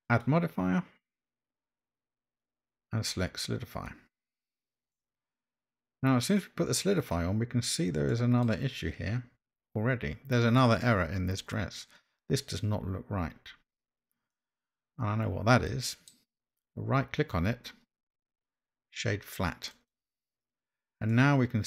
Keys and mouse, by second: 0.2-4.0 drag, 4.9-6.3 middle drag, 8.1 middle click, 14.4-16.1 middle drag, 17.3-20.0 right drag, 21.1-21.6 middle drag.